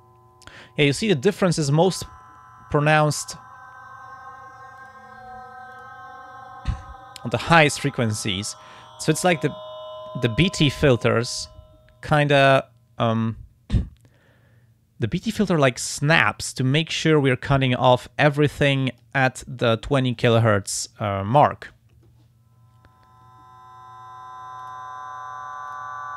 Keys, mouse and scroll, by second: 1.6-3.1 drag, 4.8 click, 5.8 click, 11.1-15.5 drag, 17.3-19.2 drag, 24.6 click, 25.7 click.